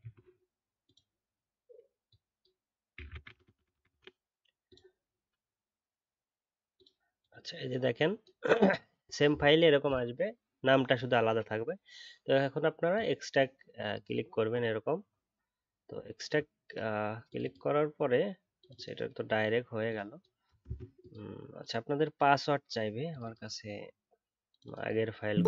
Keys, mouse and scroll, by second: 20.6 ctrl+d.